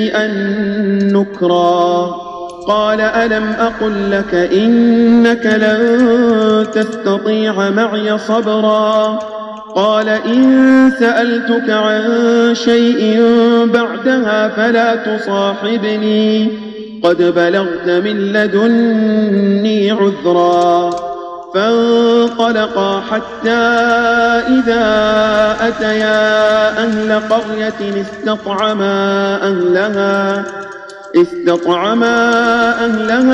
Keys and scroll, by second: 2.4 space, 5.8 space, 6.8 space, 23.7 space, 25.9 space, 27.2 space, 28.5 space, 30.1 space, 30.8 space, 32.3 space.